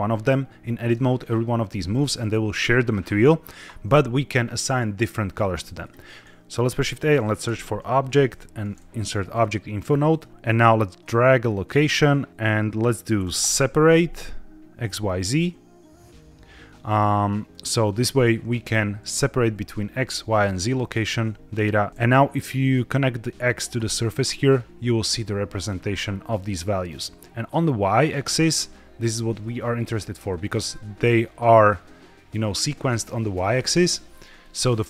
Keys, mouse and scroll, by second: 0.4 Escape, 1.6 Tab, 5.7 click, 6.6 shift+a, 10.3 shift+a, 10.9-15.0 drag, 17.4 click, 22.3-23.8 drag, 26.8-28.1 drag, 29.3 middle click, 29.8-30.2 scroll down 2, 30.2 middle click, 32.7-33.2 middle drag, 33.5-33.9 scroll up 2, 34.0 shift+middle click, 34.3 middle click.